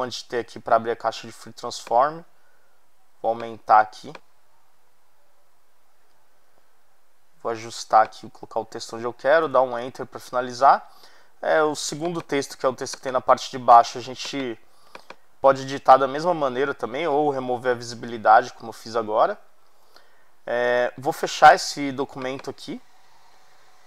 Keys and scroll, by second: 9.4 Return.